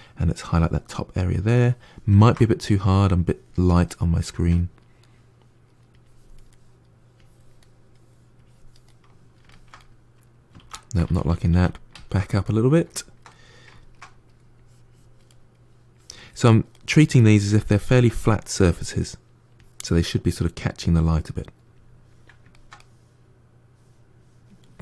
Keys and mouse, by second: 0.1 click, 0.8-2.1 middle drag, 2.1 ctrl+z, 2.6 click, 3.8-5.8 middle drag, 5.8 click, 6.4 middle click, 7.0 click, 7.5 middle click, 8.2 click, 8.7-10.5 middle drag, 10.5 ctrl+z, 11.0 ctrl+z, 11.2 ctrl+z, 11.4 ctrl+z, 12.1 ctrl+z, 12.3-14.4 middle drag, 14.4 click, 15.2 middle click, 15.8 click, 16.6-17.6 middle drag, 17.6 click, 18.2-19.4 middle drag, 19.4 click, 19.9-24.8 middle drag.